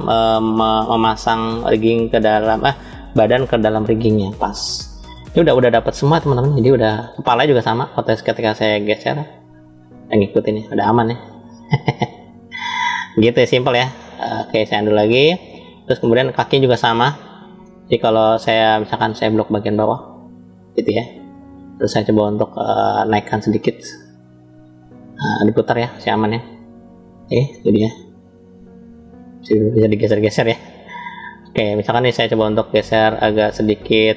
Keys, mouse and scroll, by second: 4.8-5.3 scroll down 1, 5.3-6.8 middle drag, 7.3 click, 8.8 click, 13.0 scroll up 2, 14.0 ctrl+z, 14.7-15.3 scroll down 3, 15.3-15.9 shift+middle drag, 16.1 scroll up 1, 16.7 scroll up 1, 16.9-17.6 shift+middle drag, 17.8 scroll up 1, 18.7-19.9 drag, 20.2-21.2 drag, 22.7 click, 23.9 click, 26.0 ctrl+z, 26.4-27.2 middle drag, 27.7 click, 29.4 ctrl+z, 29.8-30.7 middle drag, 31.0 click, 31.6-32.2 drag, 33.1 click, 34.0 click.